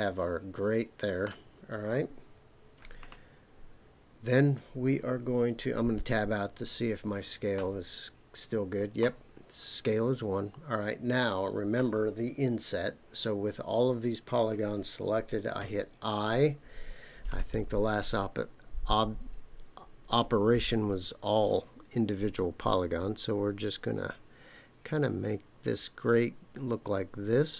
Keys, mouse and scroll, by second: 7.5 Tab, 9.0 Tab, 15.6 i.